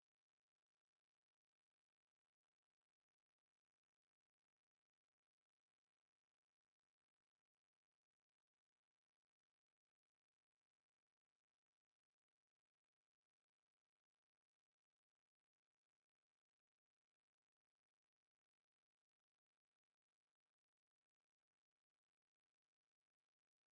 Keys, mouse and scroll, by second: 0.2 click, 0.8-3.1 drag, 4.5 right click, 5.7 middle click, 6.4 click, 8.1 right click, 10.1 click, 14.2-18.3 right drag, 17.6 g.